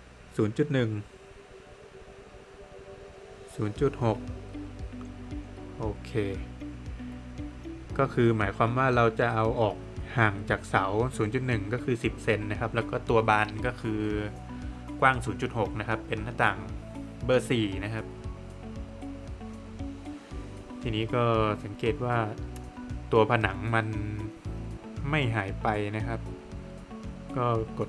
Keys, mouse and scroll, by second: 0.4 Return, 3.3 Return, 7.7 Return, 9.6 Return, 11.6 space, 12.3 Escape, 12.7 scroll up 2, 13.3 Escape, 13.7-14.7 scroll up 2, 14.8 middle click, 15.7 Escape, 16.0-17.2 scroll up 1, 17.4 click, 17.7 double click, 18.3 Escape, 18.6 click, 18.8 double click, 19.2 Escape, 21.5 click, 21.8 double click, 22.8 Escape, 24.9 click, 25.3 double click, 26.0 click, 26.8 click.